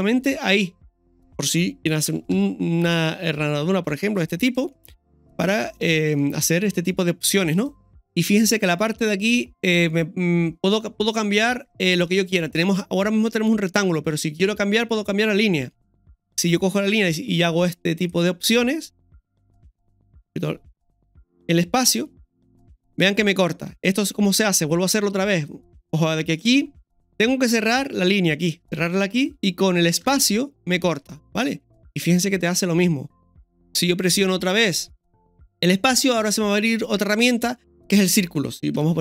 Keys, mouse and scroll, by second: 2.1 ctrl+z, 2.3 s, 4.4 right click, 4.8-5.1 scroll down 1, 5.5 Tab, 5.7 middle click, 6.7 Tab, 6.7 middle click, 7.5 right click, 7.9 ctrl+shift+x, 24.2 scroll up 1, 24.6 scroll down 1, 31.3-39.0 middle drag, 38.7 KP_1.